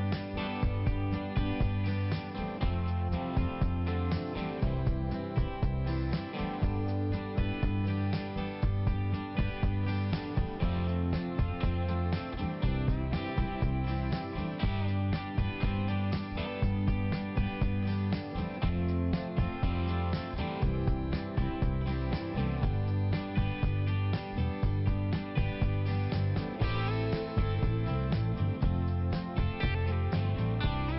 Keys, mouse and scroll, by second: 2.4 click, 2.7 click, 3.0 click, 3.2 click, 3.4 click, 3.8 click, 4.1 click, 4.5 click, 5.0 click, 5.5 click, 6.1 click, 6.5 click, 6.7 click, 6.8 click, 7.3 click, 7.4 click, 7.7 click, 7.9 double click, 8.1 double click, 8.6 click, 9.0 click, 9.2 click, 9.8 click, 12.2 click, 14.2 click, 14.9 click, 15.4 click, 15.5 click, 16.1 click, 16.6 click, 16.8 click, 17.2 click, 17.4 click, 17.7 click, 18.2 click, 18.7 click, 18.8 click, 19.0 click, 19.4 click, 19.5 click, 19.8 click, 19.9 double click, 20.3 double click, 20.8 double click, 21.9 click, 22.3 click, 22.4 click, 22.6 click, 22.7 double click, 22.9 double click, 23.2 double click, 23.3 double click, 23.7 double click, 24.1 double click, 24.7 click, 25.9 click, 26.2 click, 26.4 click, 26.5 double click, 26.7 double click, 27.1 double click, 27.2 double click, 27.9 double click, 28.3 click, 28.8 click, 29.0 click, 29.1 click, 29.3 double click, 29.5 double click, 29.8 double click, 30.4 click, 30.9 click.